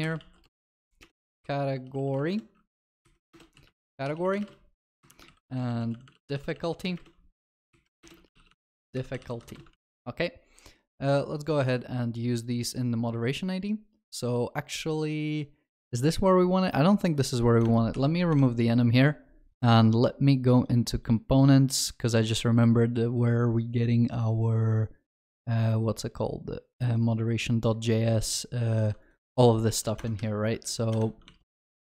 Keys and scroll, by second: 0.2 ctrl+w, 5.2 ctrl+Delete, 9.7 ctrl+s, 16.7 ctrl+x, 29.4 ctrl+v.